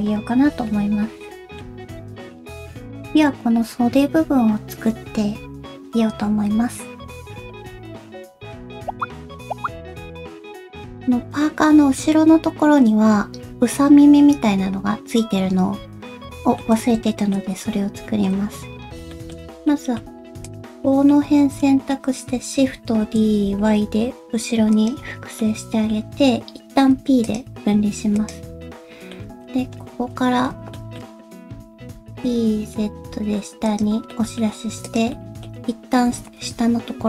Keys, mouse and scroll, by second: 16.2 middle click, 17.0 shift+middle click, 17.3-18.0 scroll up 2, 18.0-19.1 scroll down 1, 19.1 shift+middle click, 19.6 middle click, 20.4 click, 20.8 middle click, 21.6 shift+middle click, 23.0 shift+d, 25.1-25.4 scroll down 2, 25.4 middle click, 26.2-26.9 scroll up 2, 26.9 p, 27.7 Tab, 28.1 click, 28.8 middle click, 29.2 Tab, 29.5-34.5 scroll up 1, 34.5 middle click, 34.5 e, 34.5 1, 34.8 click, 35.1 middle click, 36.0 g.